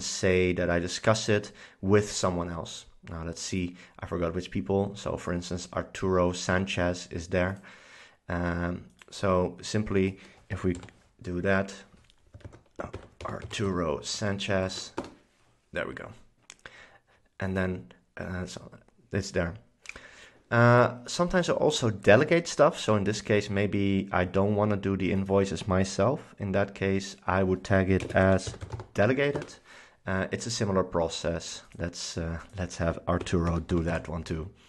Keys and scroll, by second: 10.4-11.4 typing, 12.5 super+a, 12.8-14.3 typing, 14.8 Down, 15.1 Return, 28.1-29.5 typing, 33.1-34.5 typing.